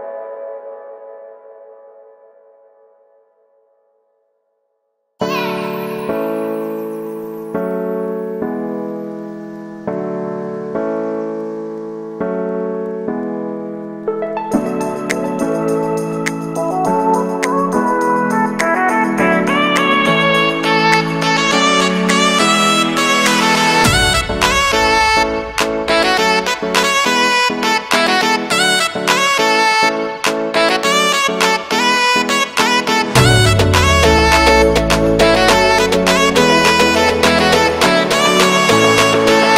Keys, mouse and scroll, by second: 0.1-2.5 right drag, 2.6 ctrl+shift+b, 5.1 w, 5.7 w, 6.5 x, 8.6 click, 9.0-13.3 alt+shift+right drag, 13.3-15.8 drag, 15.8 alt+shift+s, 19.1 alt+e, 22.0-23.3 drag, 24.2 l, 25.2 shift+n, 26.5 right click, 26.8 shift+right click, 28.0-29.1 alt+shift+right drag, 29.8 middle click, 30.1 alt+shift+right click, 30.5 shift+middle click, 30.9 scroll up 1, 31.0 alt+shift+right click, 31.3 alt+shift+right click, 31.6 middle click, 32.2 alt+shift+right click, 32.5 z, 32.8 shift+middle click, 33.7 alt+shift+right click, 34.2 middle click, 34.8 z, 35.0 middle click, 35.5 scroll up 1, 35.7 ctrl+b, 38.5 scroll down 1, 38.9 a, 38.9 a, 39.1 middle click.